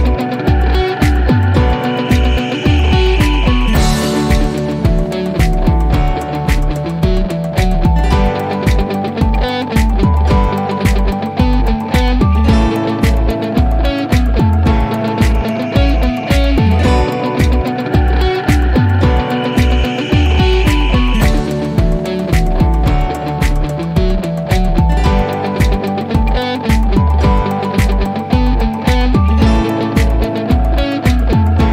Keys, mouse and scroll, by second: 0.3 scroll down 1, 1.3 p, 2.9-5.9 alt+middle drag, 21.2 scroll down 1, 24.3 click, 27.2 click, 31.4 scroll down 1.